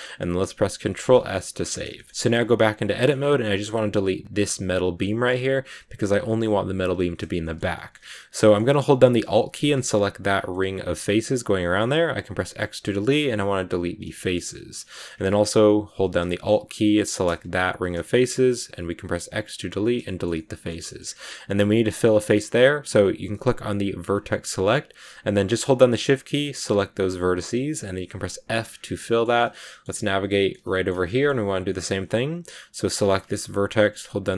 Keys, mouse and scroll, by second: 0.7 ctrl+s, 1.0 middle click, 1.4 Tab, 1.8 shift+middle click, 2.1 scroll up 1, 2.2 middle click, 3.0 scroll up 2, 4.9-8.0 shift+middle drag, 8.0-8.3 scroll up 2, 8.3-9.5 middle drag, 9.5 alt+right click, 10.2 scroll down 1, 10.4-12.1 middle drag, 12.1 x, 14.0 shift+middle click, 14.9-15.7 scroll up 3, 17.5 alt+right click, 17.9 scroll down 1, 18.0 shift+middle click, 18.3 x, 19.9 shift+middle click, 20.9-21.7 scroll up 2, 21.7-22.0 scroll up 2, 24.0 click, 25.3 right click, 26.3 shift+right click, 26.8 shift+right click, 28.3 f, 28.5 scroll down 2, 28.6 scroll up 1, 28.9-32.6 shift+middle drag, 31.5 scroll up 1, 32.6 right click.